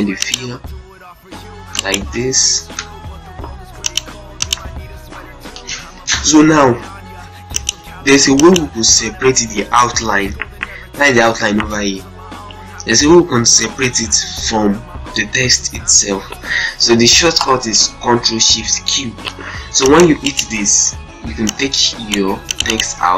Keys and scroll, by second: 1.3 z, 1.9 ctrl+shift+space, 2.3 F12, 4.9 shift+F2, 18.5 ctrl+shift+q, 19.9 z, 20.4 ctrl+space, 23.0 ctrl+a.